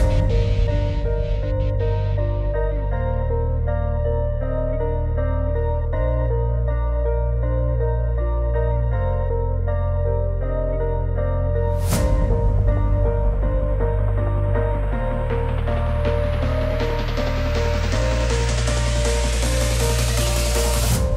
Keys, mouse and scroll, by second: 0.0 click, 2.2 click, 2.2 click, 4.5 click, 5.8-6.5 z, 7.0 click, 8.4-8.7 ], 10.2 x, 11.2-12.6 typing, 13.6 x, 15.4 click, 16.8 click, 18.3 Up.